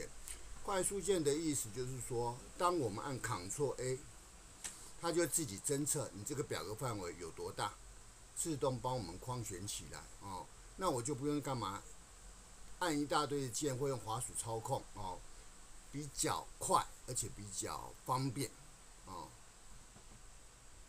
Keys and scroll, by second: 4.5 ctrl+a.